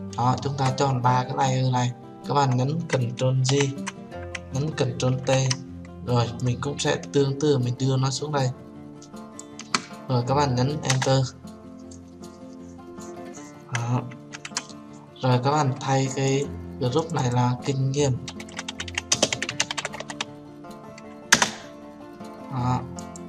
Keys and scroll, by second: 3.8 ctrl+j, 5.6 ctrl+t, 11.2 Return, 21.6 Return.